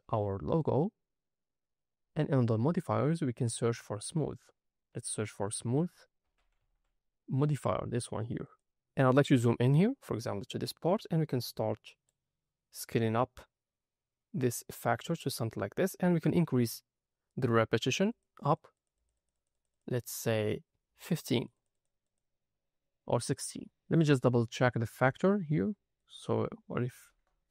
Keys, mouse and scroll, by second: 0.4 scroll down 3, 3.4-8.5 drag, 6.6 o, 9.2-12.0 scroll up 7, 12.0-15.5 drag, 18.0 click, 18.3 click, 18.7 click, 18.9 click, 19.1 click, 19.3 click, 19.4 click, 19.6 click, 19.8 click, 20.9 click, 21.1 click, 21.3 click, 21.5 click, 21.6 click, 22.0 click, 22.9-23.6 scroll down 3, 25.9-27.0 drag.